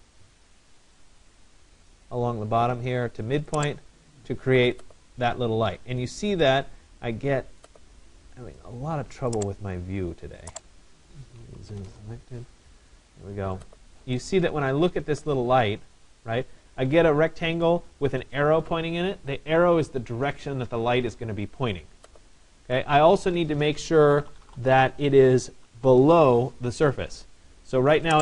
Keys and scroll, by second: 11.3 Return, 24.1 Return.